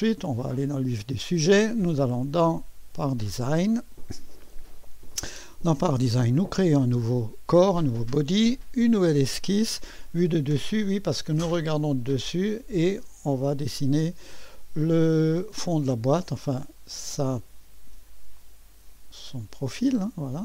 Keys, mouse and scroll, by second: 0.0 click, 1.8 click, 3.0 click, 5.1 click, 6.2 click, 8.8 click, 11.3 click, 13.6 click, 15.6 click, 18.4 click, 19.4 click.